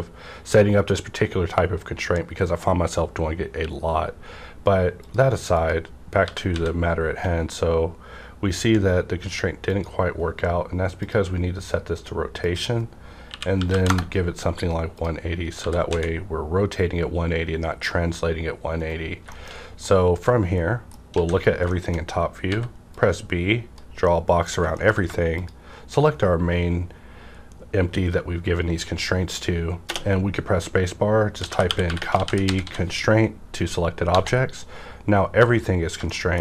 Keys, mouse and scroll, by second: 5.1 click, 6.2 typing, 9.7 click, 9.7 z, 10.9 click, 13.2 KP_1, 13.5 KP_8, 13.7 KP_0, 13.8 KP_Enter, 14.9 click, 15.0 click, 15.5-15.8 typing, 18.8 right click, 19.2 shift+scroll down 2, 19.3 shift+middle click, 19.5-20.0 shift+scroll up 2, 19.8 middle click, 19.8-21.7 middle drag, 21.1 alt+a, 22.4 b, 22.9-24.7 drag, 24.0 middle click, 24.0 middle click, 24.7 shift+middle click, 25.3 click, 27.9 scroll down 1, 31.3-32.6 typing, 34.0 Return, 36.0 shift+scroll down 1, 36.0 middle click, 36.1 shift+middle click.